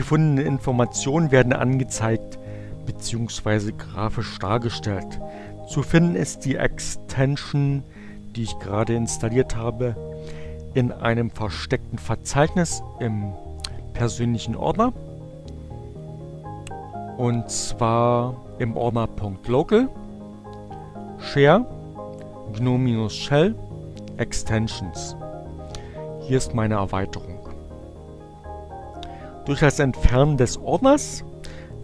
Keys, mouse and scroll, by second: 6.1 click, 13.0 click, 17.0 click, 17.9 click, 20.3 click, 21.6-22.7 drag, 23.5 click, 25.5 click.